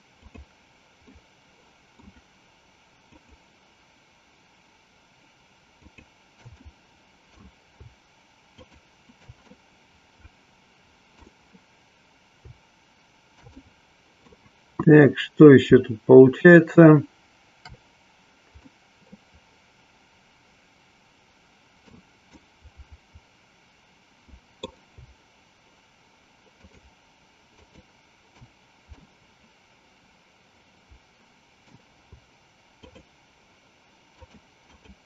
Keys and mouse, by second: 0.3 shift+click, 1.2-2.2 shift+middle drag, 3.0 shift+click, 5.7 shift+click, 6.7 middle click, 8.6 shift+click, 9.6-11.3 middle drag, 13.6 middle click, 18.7-22.0 middle drag, 22.5-24.7 middle drag, 26.6 shift+click, 27.7 shift+click, 29.0-31.8 middle drag, 34.1 shift+click, 34.8 shift+click.